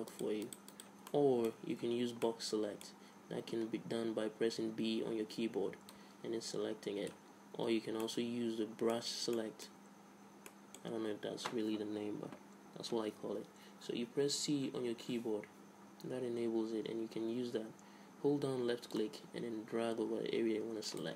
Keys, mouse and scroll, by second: 1.3-2.9 drag, 1.8 a, 2.0 z, 5.6 b, 7.8 a, 8.2-12.5 middle drag, 16.3 c.